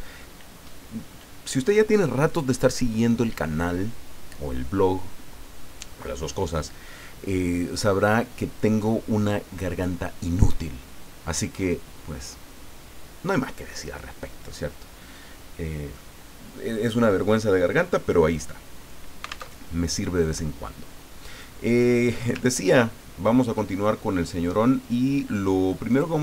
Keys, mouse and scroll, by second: 18.3 click, 19.5 alt+Tab, 21.3 click, 22.5-22.9 ctrl+scroll up 2, 25.9 click.